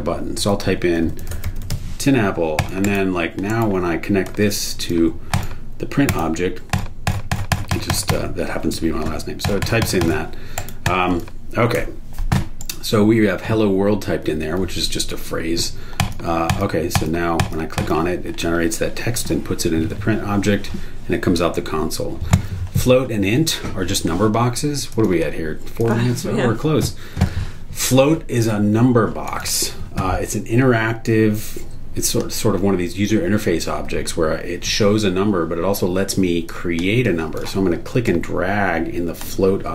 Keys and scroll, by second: 0.9-2.2 typing, 2.8 super+e, 6.1 super+e, 10.5 super+e, 11.8 BackSpace, 12.6 super+e.